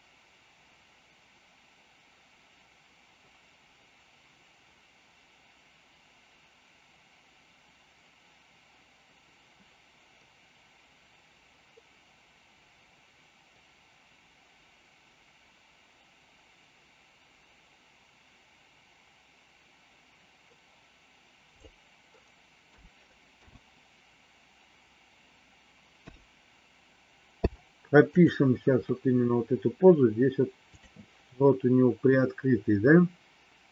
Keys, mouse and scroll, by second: 22.6 a, 23.4 KP_8, 25.9 KP_3, 27.3 i, 30.6 click.